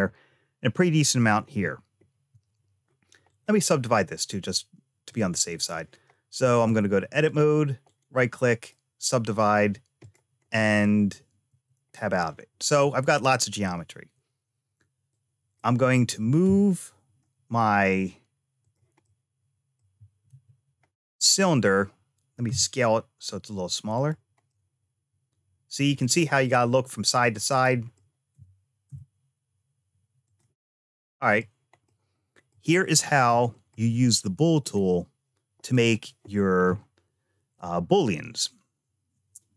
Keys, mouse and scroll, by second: 3.1-4.7 right drag, 4.9 click, 5.4 click, 6.4 click, 7.7-8.9 right drag, 9.8 click, 10.3 middle click, 11.3 Tab, 14.9 click, 16.3 g, 18.9 middle click, 20.1 `, 22.3 s, 24.3-27.8 middle drag, 28.2 g, 30.5 middle click, 31.7 middle click, 33.3 shift+middle click, 34.4 click, 35.4 click.